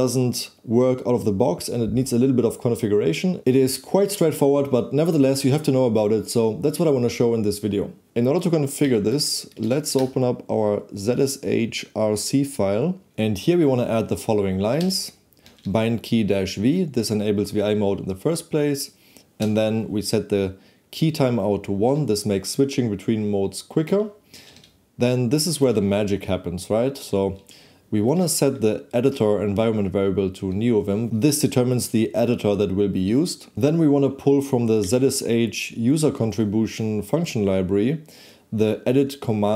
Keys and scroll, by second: 8.8 v, 9.2 space, 9.7 Right, 10.0 Return.